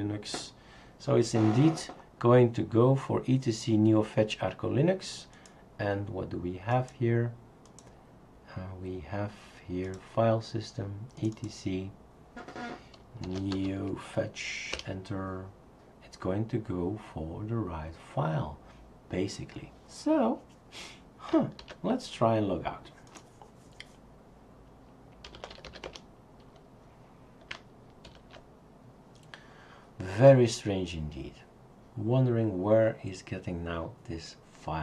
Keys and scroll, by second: 0.0-0.1 typing, 13.0-14.2 typing, 14.7 Return, 21.6 super+x.